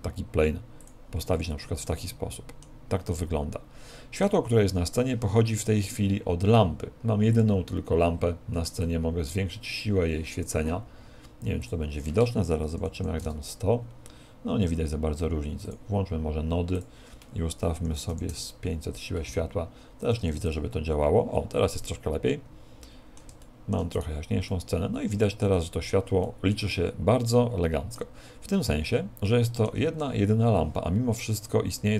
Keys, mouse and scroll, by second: 0.8 click, 1.3 middle click, 3.1 middle click, 7.3 click, 8.8 click, 11.6 click, 16.7 click, 20.0 click, 21.8 middle click, 23.5 shift+middle click, 24.3 right click, 24.5 middle click, 26.2 middle click, 27.3 middle click, 28.8 shift+middle click.